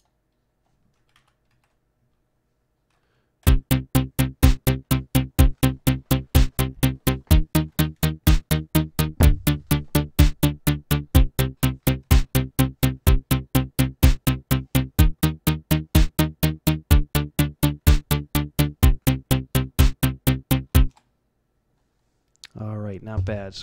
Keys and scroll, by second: 1.1 ctrl+Down, 1.5 ctrl+v, 3.4 F11, 20.9 F12.